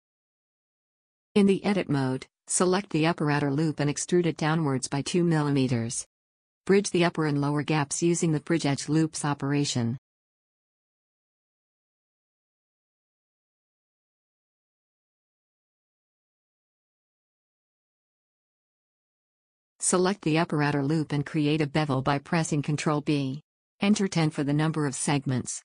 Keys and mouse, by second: 1.4 Tab, 2.5 a, 4.4 e, 7.7 middle click, 10.0 right click, 10.7 w, 13.1 click, 14.2 a, 16.0 w, 17.0-18.1 middle drag, 18.3 click, 18.6 middle click, 18.7 a, 20.7-22.3 drag, 21.7 ctrl+n, 22.4 Escape, 23.0 ctrl+b.